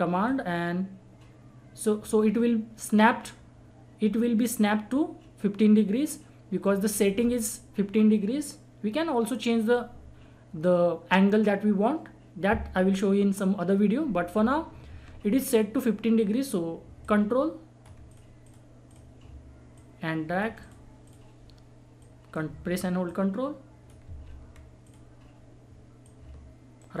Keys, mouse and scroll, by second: 0.2-6.6 ctrl+drag, 6.6 ctrl+right click, 14.7 ctrl+Num_Lock, 14.7 ctrl+right click, 14.9 ctrl+z, 17.0 ctrl+click, 17.3 ctrl+click, 19.8-24.1 ctrl+drag, 24.1 ctrl+z, 24.8 click, 26.8 ctrl+right click.